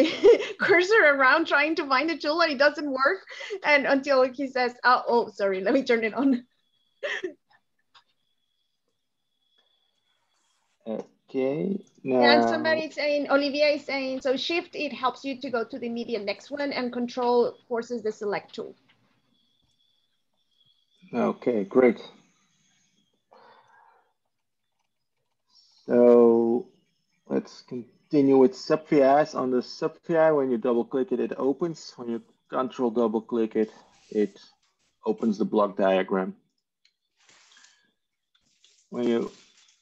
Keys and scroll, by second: 38.6 Tab.